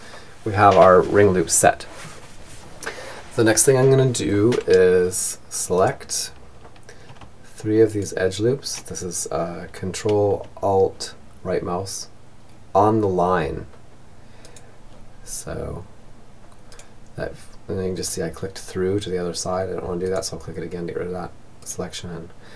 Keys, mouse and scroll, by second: 4.1-5.9 right drag, 6.6-8.1 right drag, 12.8-14.5 right drag, 15.1-16.9 right drag, 18.4-21.8 right drag, 22.1-22.5 middle drag.